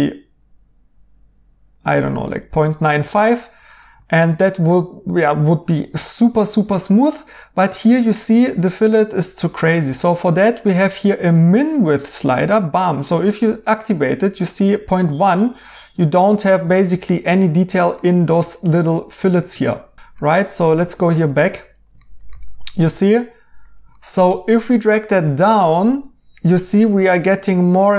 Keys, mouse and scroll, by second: 2.9 right click, 14.9 right click, 16.6 right click, 19.8 right click, 23.6 right click.